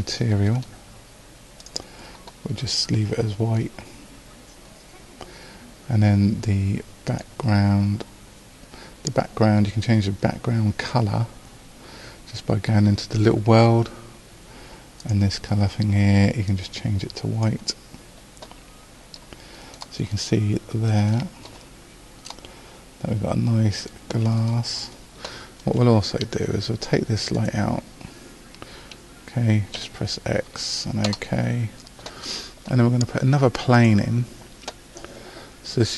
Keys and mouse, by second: 1.6 click, 20.8-22.8 middle drag, 29.8 x.